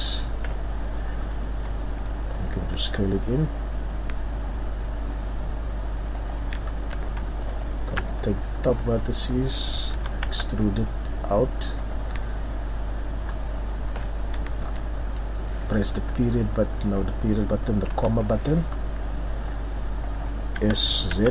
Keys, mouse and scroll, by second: 0.4 KP_3, 1.2 scroll up 2, 1.9 ctrl+scroll down 1, 2.8 s, 6.2 click, 6.6-7.5 shift+scroll up 3, 7.5 alt+right click, 8.2-8.8 scroll down 5, 8.7 middle click, 9.2-9.9 scroll up 1, 9.9 e, 12.0 click, 13.3-14.0 scroll down 2, 14.0 scroll down 1, 14.0 KP_3, 14.6-15.0 shift+scroll up 1, 15.3 shift+scroll up 2, 16.0 ., 17.9 ,, 18.7-19.5 scroll up 2, 19.5 click, 20.6 s.